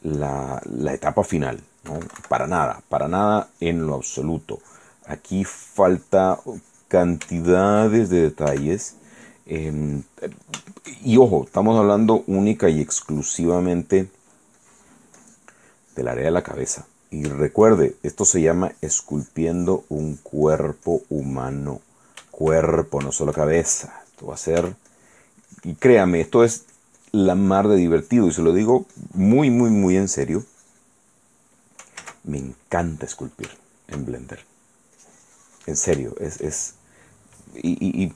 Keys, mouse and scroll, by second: 0.4-1.4 drag, 2.1 KP_Subtract, 2.5 click, 3.2 click, 4.3 middle click, 4.8 click, 5.3 middle click, 7.1 click, 7.2-8.5 shift+middle drag, 8.7 shift+f, 9.3 click, 9.8 click, 10.8 shift+middle click, 11.7-14.0 shift+drag, 14.1 shift+click, 14.8 shift+click, 15.4 click, 16.0-17.5 drag, 18.5-20.1 shift+drag, 20.2 click, 21.9 click, 22.5 shift+click, 23.1 shift+right click, 23.3 shift+right click, 24.8 f, 25.1 click, 25.7-28.1 drag, 28.2 click, 28.9 middle click, 29.1-30.4 drag, 30.6 click, 31.3 middle click, 32.2 ctrl+z, 32.6 ctrl+click, 33.8 shift+click, 34.4 shift+middle click, 35.2 click, 36.3 shift+middle click, 37.2 shift+middle click, 37.3 shift+middle click.